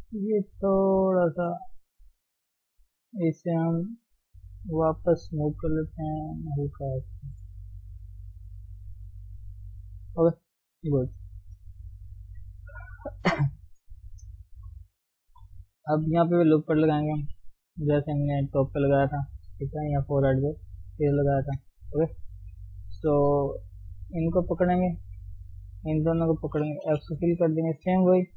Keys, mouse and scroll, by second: 2.8 click, 5.0 click, 5.6 g, 7.7 click, 8.0 g, 9.1 click, 9.6 g, 10.8 KP_1, 11.0 KP_3, 11.4-12.8 scroll up 2, 13.0-14.2 middle drag, 14.2 click, 15.3 KP_7, 16.6 ctrl+r, 17.6 g, 19.8 KP_1, 20.6-21.4 scroll down 2, 21.4 shift+middle click, 22.0 KP_7, 22.3-23.0 scroll up 1, 23.0 shift+middle click, 23.2 scroll down 1, 23.3 middle click, 24.2 click, 25.0 middle click, 25.8 shift+click, 26.3 shift+click, 27.0 f, 27.4 middle click, 27.8 KP_3.